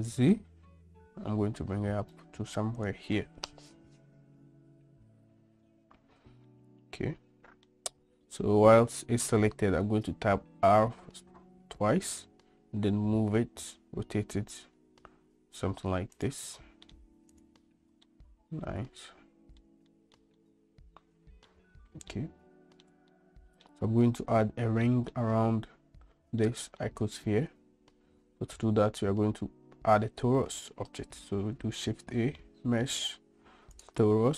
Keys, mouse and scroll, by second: 6.6-7.8 middle drag, 10.7 r, 17.0 middle click, 17.5 click, 18.2-19.8 middle drag, 20.1 shift+middle drag, 20.5-21.6 middle drag, 22.3-23.0 middle drag, 23.3-23.8 shift+middle drag, 25.0 middle drag, 26.6-27.0 middle drag, 32.1 shift+a.